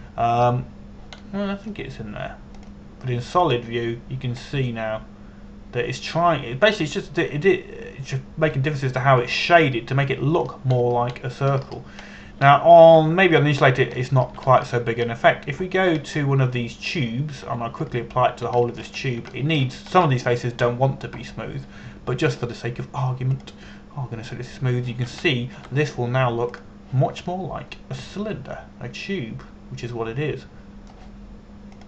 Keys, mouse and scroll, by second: 0.0 Tab, 1.4 middle click, 4.3 click, 6.2 middle click, 12.5-12.9 scroll down 1, 13.2 scroll up 1, 13.8 scroll down 1, 14.2 shift+middle click, 15.6 shift+middle click, 16.2 scroll up 1, 16.7-17.2 scroll down 1, 17.2 Tab, 17.7-19.1 scroll down 1, 19.1 Tab, 19.5 right click, 20.3 shift+middle click, 20.7 scroll up 1, 21.0 shift+middle click, 21.6-25.0 scroll up 1, 25.0 click, 26.9 shift+middle click, 28.2 click, 29.0 middle click.